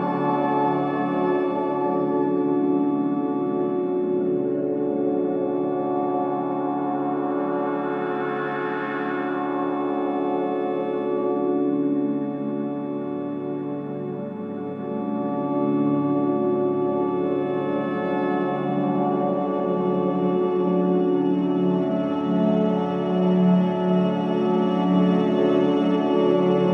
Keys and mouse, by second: 0.7 alt+click, 1.6 alt+click, 1.7 Tab, 2.2 ctrl+alt+click, 6.8-9.0 alt+drag, 9.9 click, 10.7 click, 11.4 shift+click, 12.7 click, 13.7-15.1 alt+drag, 15.4-18.5 ctrl+alt+drag, 18.5 alt+click, 20.5 j, 21.8-26.3 alt+drag.